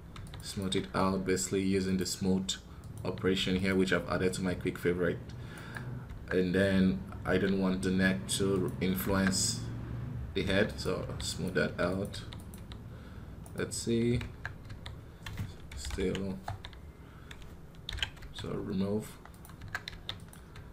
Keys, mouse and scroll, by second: 2.9-5.2 drag.